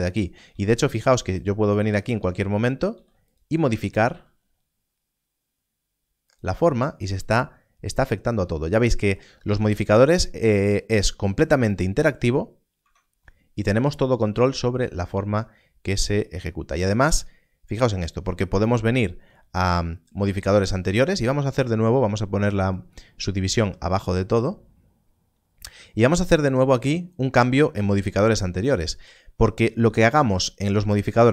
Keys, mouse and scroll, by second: 0.5 ctrl+r, 0.9-1.6 scroll up 1, 1.6-2.0 scroll up 2, 1.6 right click, 2.9 ctrl+r, 3.5 right click, 4.0 s, 6.2 s, 6.3 click, 6.6-8.6 scroll down 1, 10.3-12.5 scroll down 1, 12.7 Tab, 20.2 Tab, 26.3 click.